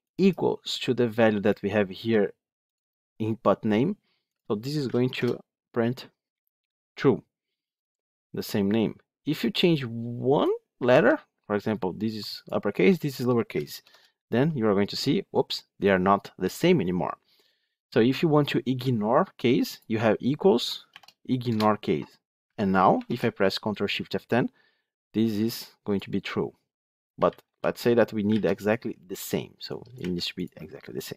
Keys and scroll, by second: 5.0 ctrl+shift+F10, 13.8 ctrl+shift+F10, 21.4 Return, 22.8 ctrl+shift+F10, 27.2 ctrl+z, 28.2 ctrl+z.